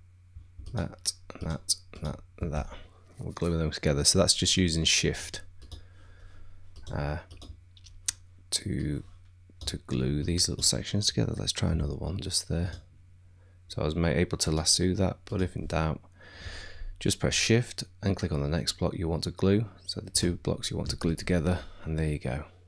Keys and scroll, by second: 11.7 t.